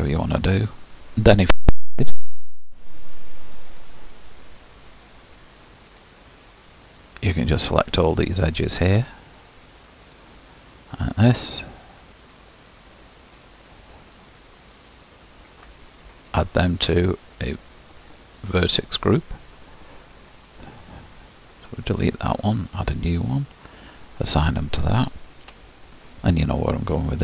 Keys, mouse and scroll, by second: 0.4 click, 5.2 alt+shift+click, 7.0 alt+shift+click, 7.8 alt+shift+click, 9.5 alt+shift+click, 10.2 alt+shift+click, 12.0 alt+shift+click, 12.8 alt+shift+click, 17.1-25.6 drag, 25.6 Tab.